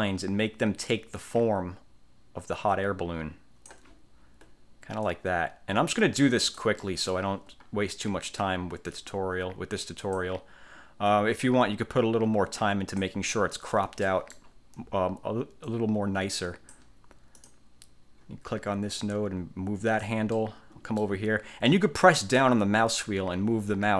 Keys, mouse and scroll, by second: 5.2-6.9 drag, 7.0 middle click, 7.2 click, 7.8-8.2 ctrl+scroll up 1, 9.1-10.5 drag, 11.2-13.3 drag, 13.6-14.1 ctrl+scroll down 2, 14.2 ctrl+middle click, 14.5 ctrl+click, 14.6 ctrl+scroll up 2, 15.8-17.0 drag, 17.5 click, 19.1-20.4 drag, 20.5 middle click, 20.8 click, 21.8-23.9 drag.